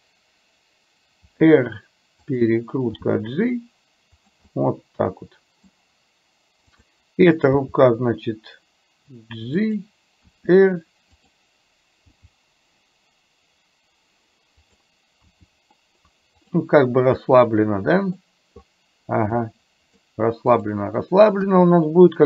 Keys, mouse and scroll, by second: 1.2 r, 3.1 g, 4.5-5.7 middle drag, 6.9 click, 7.6 g, 10.4 r, 12.2 g, 15.4 r, 17.2-18.4 middle drag, 19.5 middle click, 20.6 click, 21.4 KP_1.